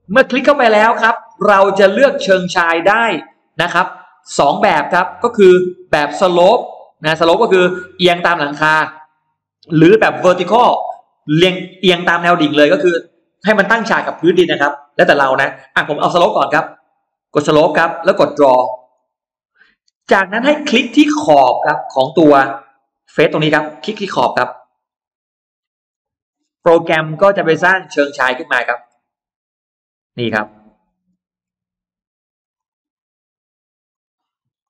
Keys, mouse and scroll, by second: 0.6-4.4 drag, 5.2 click, 17.1 click, 18.8 click, 20.1-21.3 scroll up 6, 22.7 click, 23.9 click, 25.7 click, 26.2-27.4 scroll down 3, 26.9 middle click, 27.5-29.2 scroll up 2, 27.6 middle click, 29.6 click, 30.0 scroll down 2, 30.4 middle click, 30.8 scroll down 2, 31.3 scroll up 2, 32.4 click, 32.7-33.0 scroll down 1, 33.7 click, 34.4 click.